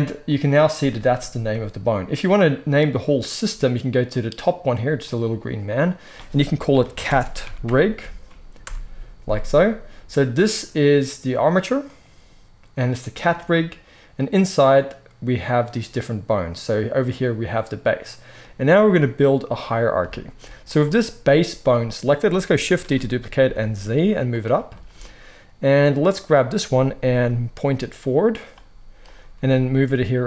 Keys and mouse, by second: 0.1 click, 3.8 click, 5.7-11.9 drag, 15.5 click, 20.2 shift+middle click, 20.6-22.3 drag, 22.3-26.1 shift+middle drag, 22.7 shift+d, 26.1 click, 26.1-28.9 middle drag, 27.0 g, 28.9 click, 29.0-30.2 middle drag, 29.2 g.